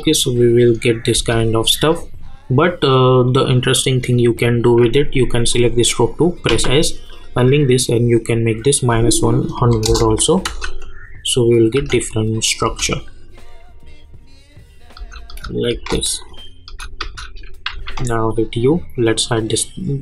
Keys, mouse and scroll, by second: 1.7-2.1 scroll up 1, 2.1-3.3 scroll down 1, 3.3 click, 6.5 s, 7.1 click, 9.6 -, 9.8 Return, 10.4 space, 12.3 click, 12.6 space, 14.9 space, 16.2 click, 16.7 space, 17.7 u, 19.1 click.